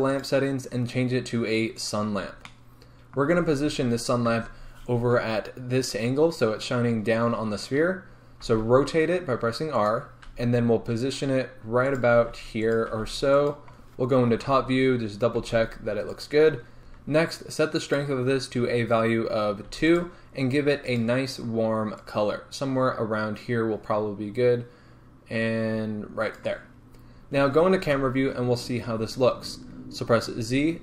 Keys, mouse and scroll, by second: 0.2 click, 1.8 click, 2.3 scroll down 2, 2.5-9.9 middle drag, 4.3 KP_1, 8.5 r, 9.9 click, 10.3 g, 12.0 click, 12.2 r, 12.8 click, 13.0 g, 13.5 click, 14.4 KP_7, 15.5 r, 16.2 click, 16.7 scroll up 1, 16.8-17.8 middle drag, 17.8-20.0 drag, 20.9 click, 27.8 KP_0, 28.9-29.3 scroll up 2, 30.4 z.